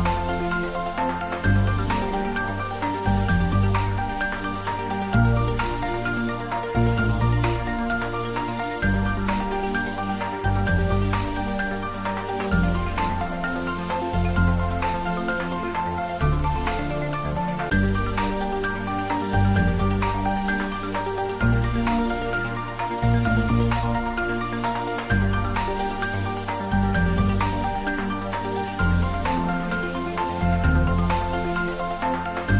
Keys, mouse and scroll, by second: 0.2 s, 1.7 click, 2.0 middle click, 2.5 click, 6.0 g, 6.9 click, 7.2 shift+a, 7.8 click, 8.0 middle click, 8.7 click, 9.0 s, 9.3 click, 10.6 shift+z, 11.3 g, 12.9 click, 13.2 middle click, 15.2 s, 15.8 click, 16.1 Tab, 16.3 ctrl+middle click, 16.4 ctrl+middle click, 17.0 shift+z, 17.9 ctrl+r, 19.8 click, 21.0 y, 24.1 click, 24.4 middle click, 25.8 ctrl+r, 27.8 click, 28.0 s, 29.7 click, 30.9 ctrl+middle click, 31.5 s, 32.4 click.